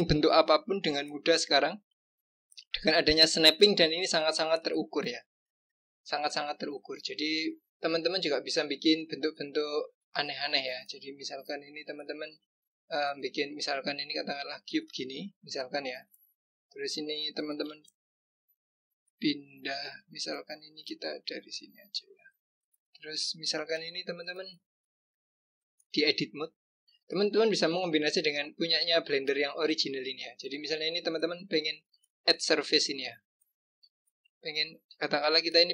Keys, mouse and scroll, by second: 0.5-2.0 scroll up 2, 2.0 click, 7.3 click, 10.6-13.6 drag, 17.6 g, 22.6-23.0 scroll up 1, 23.0 click, 23.6 click, 25.8-28.8 drag, 31.7-33.7 drag, 34.8 click.